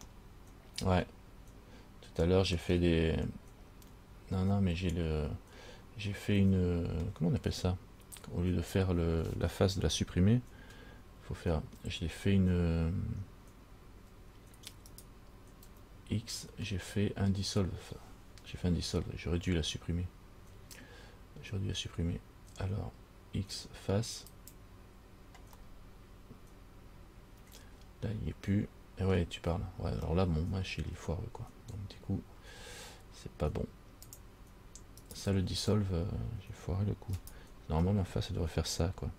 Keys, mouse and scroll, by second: 0.3 middle click, 6.7 middle click, 12.0 f, 15.1 right click, 15.8 x, 25.9 middle click, 30.3 middle click, 34.3 click, 35.3 right click, 37.4 shift+right click.